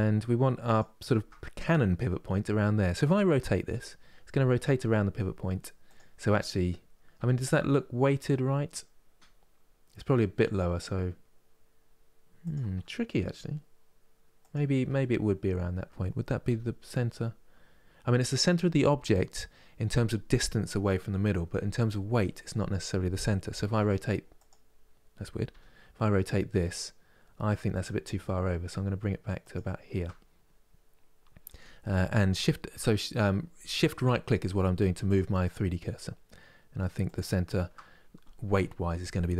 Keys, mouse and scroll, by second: 0.4-3.3 shift+right drag, 3.3 r, 14.1-16.1 shift+right drag, 16.1 r, 29.1-32.1 shift+right drag, 34.8-39.3 shift+right drag.